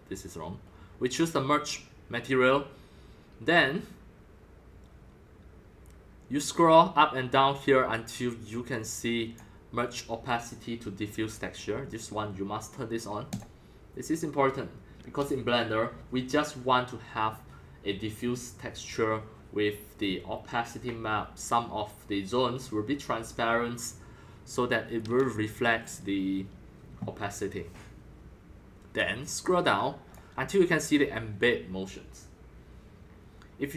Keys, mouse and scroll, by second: 1.5-2.8 drag, 3.5-16.3 drag, 29.2-33.7 drag.